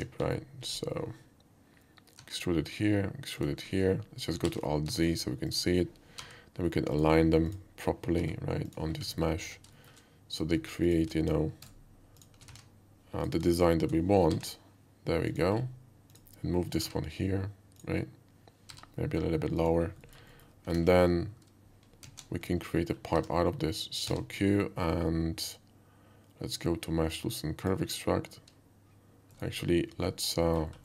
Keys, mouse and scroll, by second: 0.3 alt+middle click, 2.2 e, 3.4 click, 4.5 alt+z, 5.0 middle click, 5.5 click, 6.2 g, 6.9 click, 7.5 click, 8.7 click, 9.1 alt+middle click, 9.5 alt+shift+middle click, 10.3 shift+click, 10.8 shift+click, 11.7 alt+right click, 12.2 shift+click, 12.5 alt+a, 13.2 click, 13.5 shift+click, 14.3 g, 15.2 click, 16.1 click, 17.8 click, 19.6 click, 20.0 middle click, 20.3 alt+middle click, 22.0 alt+z, 22.7 middle click, 23.2 Tab, 24.0 q, 27.5 click, 29.9 /, 30.4 middle drag.